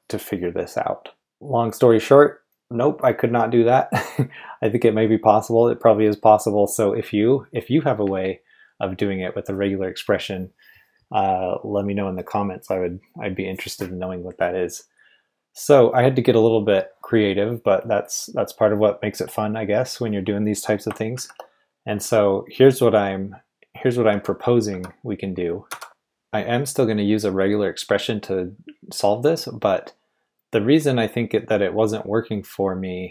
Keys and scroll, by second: 21.1 shift+b, 24.1-26.3 typing.